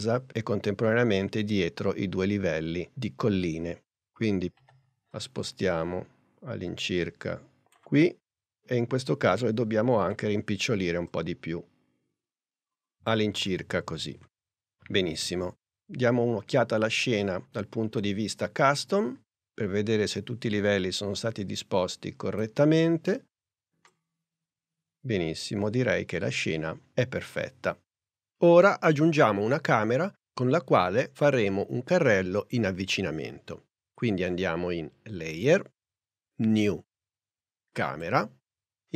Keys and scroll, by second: 4.7 p, 10.1 s.